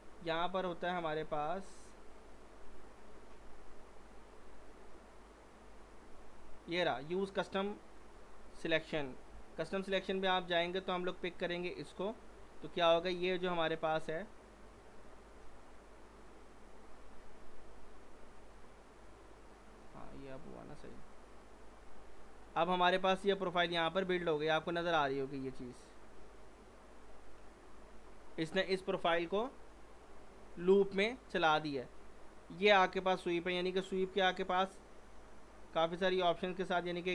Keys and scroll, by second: 9.3 F3, 21.8 w.